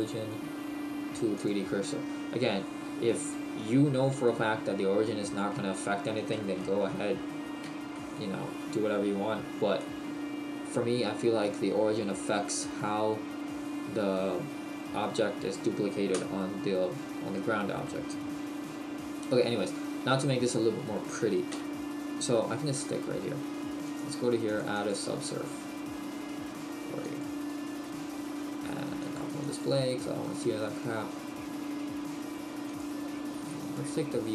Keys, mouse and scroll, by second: 2.4-3.1 scroll down 1, 3.1 shift+middle click, 6.8 t, 7.9 shift+middle click, 9.1-9.8 scroll down 1, 9.8 middle click, 22.6 KP_1, 29.5 click.